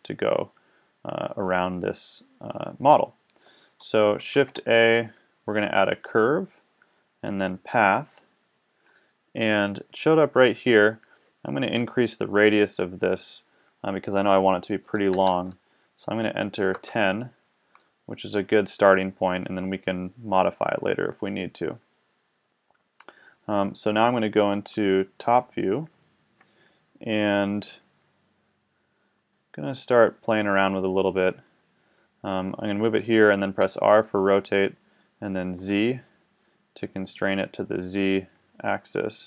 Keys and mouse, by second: 4.4 shift+a, 11.9-13.7 middle drag, 24.8 KP_7, 29.4-31.2 drag, 31.2 middle click, 33.6 r.